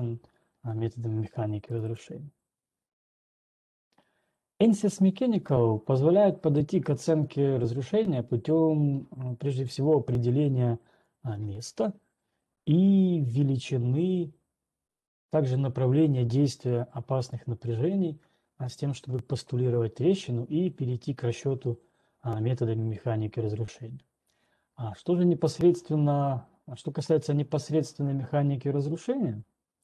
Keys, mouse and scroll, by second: 2.5 right click, 3.7 right click, 4.8 scroll down 1, 5.5 scroll down 2, 6.0-6.9 scroll down 10, 11.5-12.0 scroll down 1, 12.0 ctrl+2, 12.0 scroll, 17.5 click.